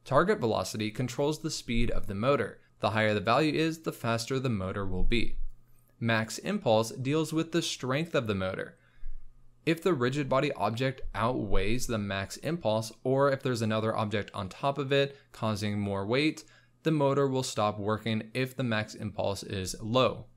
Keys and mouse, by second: 0.0 z, 0.0 space, 0.2 space, 4.0 space, 5.7 click, 8.0 click, 9.1 click, 10.7 space, 12.9 click, 14.3 space, 15.2 click, 16.3-17.9 drag, 18.6 space, 19.4 space, 20.0 click.